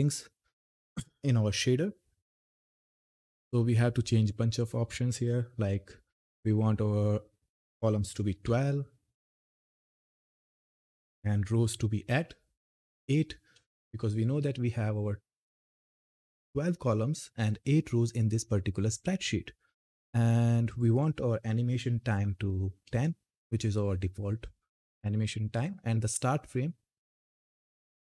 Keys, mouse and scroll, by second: 4.2 click, 9.4 click, 13.3 Return, 20.4 click, 22.6 Return, 25.3 click.